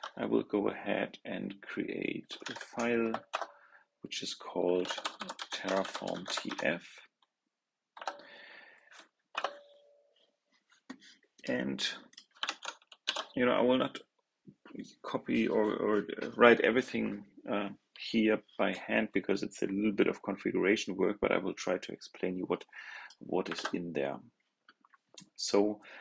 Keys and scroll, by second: 12.3 super+a, 12.9 super+c, 23.4 super+v.